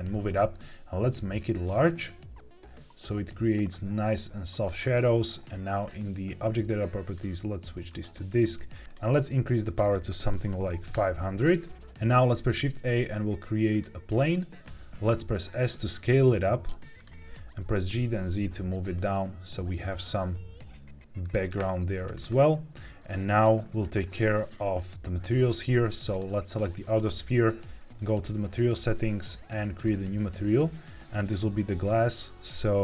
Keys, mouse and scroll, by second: 0.2 click, 0.9 click, 5.7 click, 7.0-8.0 drag, 8.6 click, 9.6-10.8 drag, 10.4 KP_0, 12.1 shift+a, 14.6 s, 16.9 click, 17.4 g, 17.5 z, 21.1 click, 22.0-24.2 scroll up 6, 26.0 click, 27.9 click, 29.7 click.